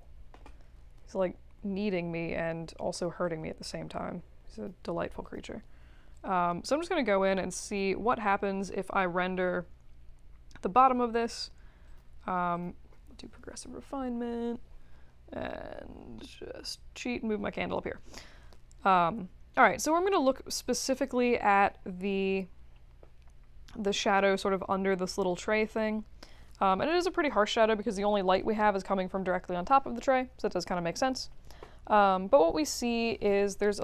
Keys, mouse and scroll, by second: 3.2-3.6 drag, 4.5 click, 5.2 click, 6.1-8.7 drag, 11.9 click, 16.5-18.5 alt+middle drag, 21.3 click, 21.9-23.6 middle drag.